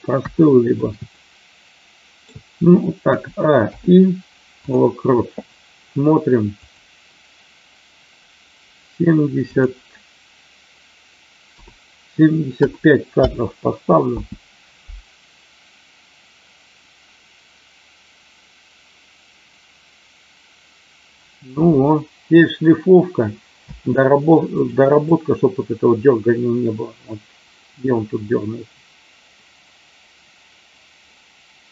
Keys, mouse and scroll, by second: 1.2-2.3 middle drag, 3.1 a, 3.6 i, 6.6 click, 9.4-13.5 drag, 14.0 space, 23.5 space, 24.4 click, 25.0-31.7 drag.